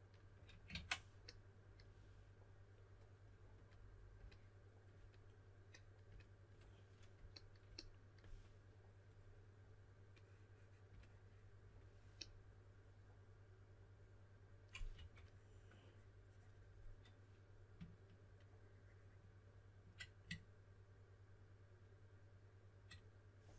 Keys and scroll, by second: 0.7 super+z, 14.9 typing.